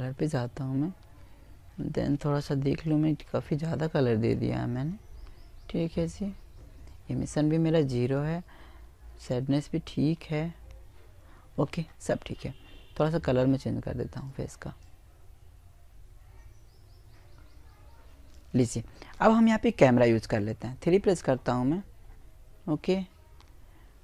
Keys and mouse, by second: 0.6 click, 0.6-2.1 right drag, 4.6 click, 4.6-6.2 middle drag, 4.6-6.2 right drag, 11.9 click, 18.4 KP_3, 21.5-23.3 middle drag, 23.3 click.